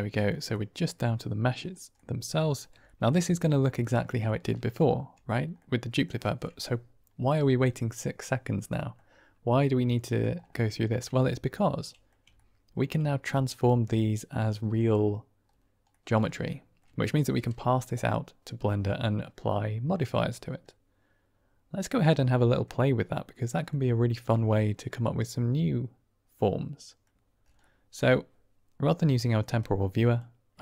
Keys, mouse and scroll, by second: 0.4-1.4 middle drag, 1.9-2.3 middle drag, 2.8 shift+middle drag, 3.7-4.2 middle drag, 5.5-6.0 middle drag, 8.2-8.9 middle drag, 9.4-10.1 middle drag, 10.8 shift+middle click, 11.1-12.0 middle drag, 12.3-12.7 ctrl+middle drag, 13.6-14.7 middle drag, 15.8-16.2 middle drag, 16.4-16.7 shift+middle drag, 20.6-23.6 middle drag, 24.5-27.0 middle drag, 27.7 middle click, 29.5 click, 30.5-30.6 typing.